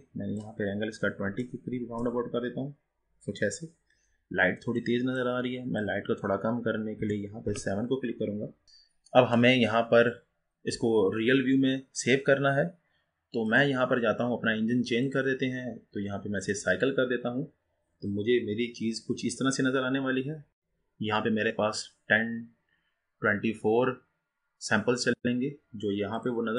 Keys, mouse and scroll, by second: 1.9 click, 7.5 click, 16.7-22.1 drag.